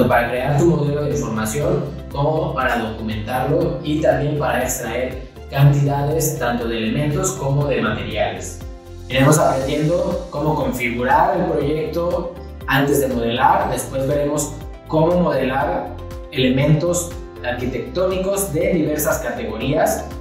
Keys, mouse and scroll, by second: 10.7 ctrl+c, 12.6 ctrl+v, 13.4 click.